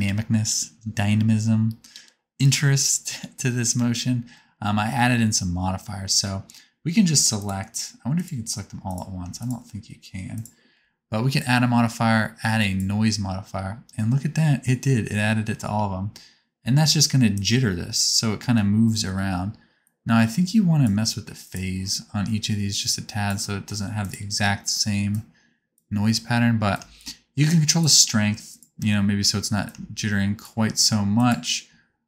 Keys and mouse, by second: 3.7-7.5 drag, 8.1 click, 8.8 click, 9.4 shift+click, 11.3-13.1 drag, 15.6 space, 19.0 space, 20.3-21.5 drag, 22.7-24.1 drag, 25.1-28.5 drag, 29.6 shift+click.